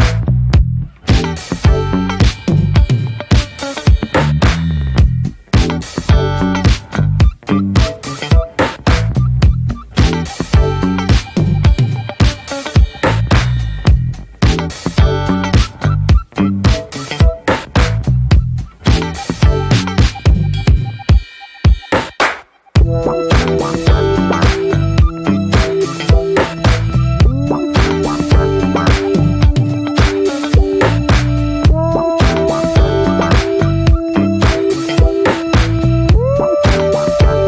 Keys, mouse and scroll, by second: 0.0 f, 0.9 scroll up 1, 1.0 shift+middle click, 1.2 scroll down 1, 1.4-3.6 shift+middle drag, 3.6 click, 3.7 scroll down 1, 3.8 shift+middle click, 4.2 ctrl+z, 4.3-7.6 right drag, 7.6-9.1 drag, 9.2 click, 10.0 ctrl+z, 10.2 ctrl+z, 10.9 click, 11.5 click, 12.4 ctrl+z, 12.9 click, 13.4 scroll down 1, 13.6-14.0 scroll up 1, 14.0 middle click, 14.4 alt+shift+middle click, 15.0-15.3 scroll up 1, 15.3-18.9 shift+middle drag, 18.9-21.0 drag, 22.5-29.1 drag, 31.3-32.8 drag, 34.9-37.4 drag.